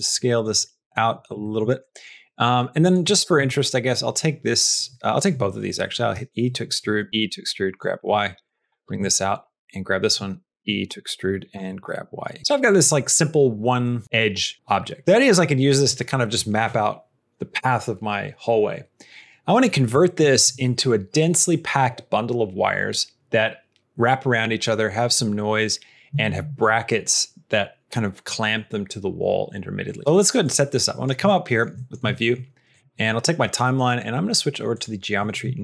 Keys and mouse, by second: 0.0 middle click, 1.3 shift+middle click, 1.7 middle click, 2.7 click, 3.0 shift+middle click, 6.0 e, 7.7 g, 8.6 shift+middle click, 9.7 shift+middle click, 10.5 e, 11.4 g, 12.4 Tab, 12.7 middle click, 13.7 middle click, 15.0 middle click, 30.3 click, 31.3 shift+middle click, 31.6 middle click, 32.0 shift+middle click, 32.7-34.7 drag.